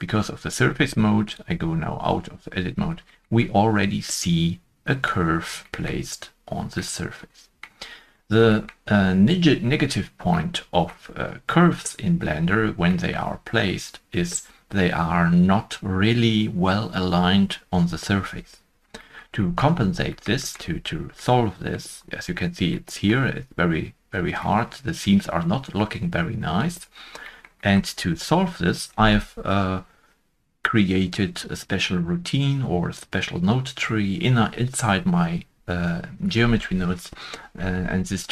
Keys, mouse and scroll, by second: 2.4 scroll up 1, 3.2 shift+scroll down 1, 3.7 shift+scroll down 1, 3.7 middle click, 5.2-5.5 scroll down 1, 5.8-6.7 shift+scroll down 1, 6.7 middle click, 8.0-8.3 scroll up 1, 10.3 scroll up 1, 10.3 middle click, 12.8 middle click, 12.9 shift+middle click, 14.0-16.3 scroll up 2, 18.9 shift+middle click, 18.9-19.3 scroll up 3, 19.3 middle click, 19.7 scroll up 1, 20.3 scroll up 1, 20.4 shift+middle click, 21.2 scroll up 1, 21.3 middle click, 21.9-22.3 scroll up 1, 24.4 middle click, 26.5 middle click, 26.6-26.9 scroll down 3, 27.5-28.3 scroll down 1, 28.3 shift+middle click.